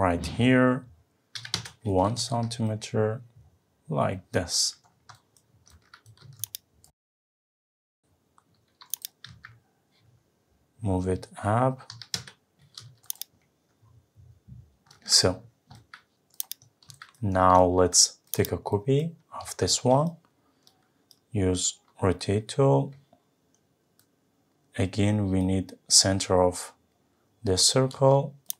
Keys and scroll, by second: 1.5 Return, 2.2 Escape, 9.3 Up, 12.2 Return.